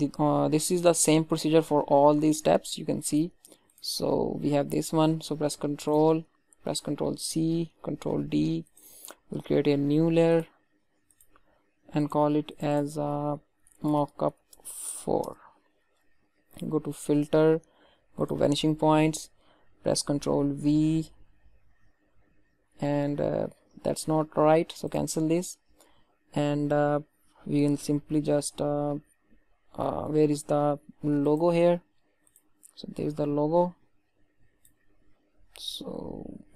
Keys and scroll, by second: 6.8 ctrl+c, 7.9 ctrl+d, 15.2 Return, 20.7 ctrl+v, 23.7 ctrl+z.